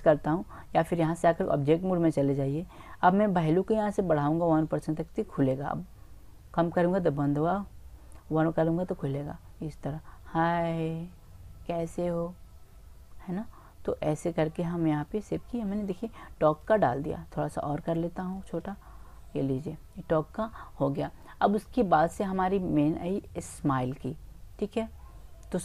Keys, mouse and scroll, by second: 0.8-1.3 typing, 1.7-2.5 drag, 3.7-5.6 drag, 16.9-18.6 middle drag, 18.6-20.4 drag.